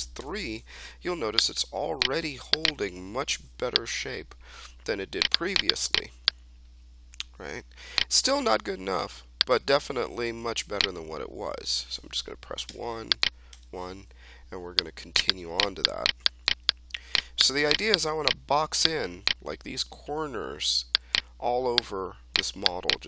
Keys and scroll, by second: 0.1 3, 3.1 3, 12.6 1.